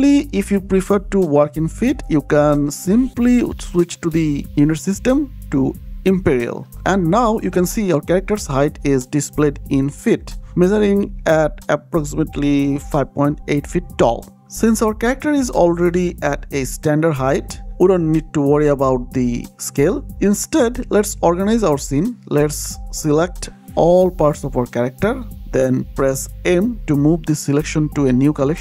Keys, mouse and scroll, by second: 4.3 click, 17.7 click, 18.5 middle click, 19.1-19.6 scroll up 1, 19.6-19.9 scroll down 1, 20.0 shift+middle click, 20.6-22.7 scroll up 1, 23.0 click, 23.9 shift+click, 26.3 m, 27.1 click, 28.1-28.6 typing.